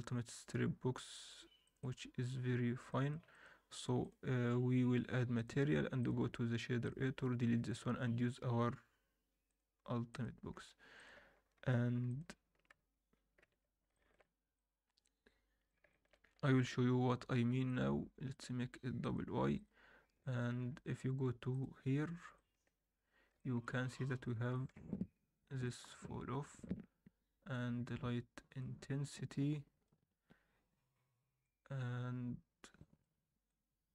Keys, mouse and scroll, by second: 2.9 middle drag, 3.3 click, 5.9 click, 7.1 x, 7.6 shift+a, 10.5-10.9 scroll up 2, 10.9 click, 11.6 ctrl+t, 12.0 click, 13.4 ctrl+x, 13.9 alt+shift+middle click, 14.5-15.7 drag, 15.9 alt+shift+middle click, 16.2 scroll up 1, 17.6-19.6 drag, 20.2 alt+middle drag, 20.6-22.1 scroll up 1, 22.1 drag, 22.4 alt+middle click, 22.8-23.5 scroll up 2, 23.4 alt+shift+middle click, 24.0 alt+middle click, 24.5 alt+shift+middle click, 25.6-27.8 drag.